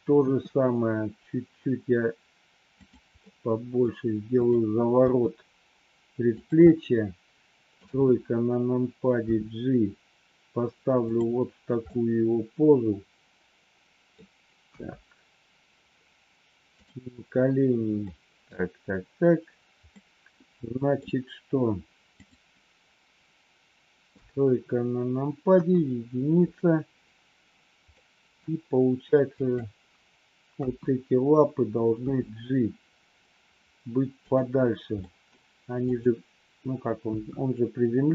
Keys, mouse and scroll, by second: 0.1 r, 3.2 middle click, 4.2 click, 5.2 g, 6.6 scroll up 1, 6.7-7.8 middle drag, 7.8 KP_3, 9.2 g, 11.8-14.1 middle drag, 14.7 KP_1, 16.6 click, 18.1 middle click, 19.8-21.0 middle drag, 24.0 KP_3, 25.5 KP_1, 28.0 middle click, 29.3 click, 30.5 KP_1, 32.0 g, 35.0 middle click, 37.0 KP_1.